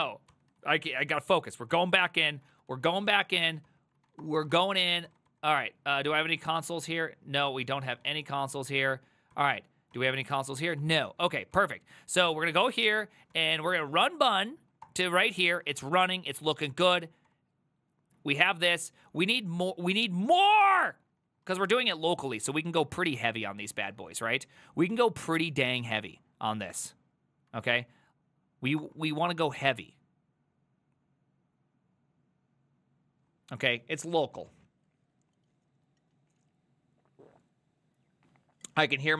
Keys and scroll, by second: 0.3 ctrl+c, 0.6 ctrl+a, 0.8 3, 1.1 ctrl+c, 1.4 ctrl+c, 1.5 ctrl+c, 1.7 Up, 2.3-11.2 typing, 3.7 ctrl+c, 7.5 Return, 9.4 ctrl+t, 10.4 ctrl+c, 11.6 Up, 12.3 ctrl+a, 12.5 ctrl+a, 12.7 Up, 13.4 ctrl+c, 13.5-14.3 typing, 14.9 Return, 15.6 ctrl+a, 16.1 Up, 16.5 Up, 16.7 ctrl+c, 16.9 typing, 17.3 Up, 18.2 ctrl+Left, 18.9 ctrl+Left, 18.9 ctrl+Left, 19.5 ctrl+Right, 19.8 Left, 20.5-21.0 Left, 21.1 Left, 21.3 Left, 21.5-22.4 typing, 22.5 Right, 22.6 Right, 22.8 Right, 23.0 Right, 23.1 Right, 23.3 Right, 23.5 Right, 23.9 0, 25.7 Right, 26.1 Left, 26.1 Right, 26.2 Left, 26.4 Left, 26.6 Left, 27.5 Right, 27.7 BackSpace, 27.9 5, 28.8 Return.